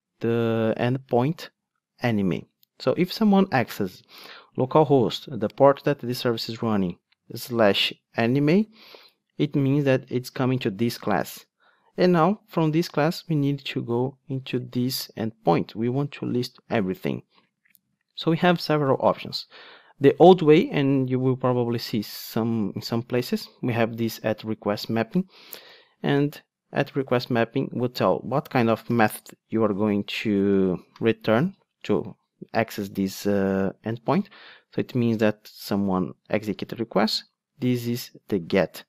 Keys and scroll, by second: 17.9 Tab, 22.2 Return.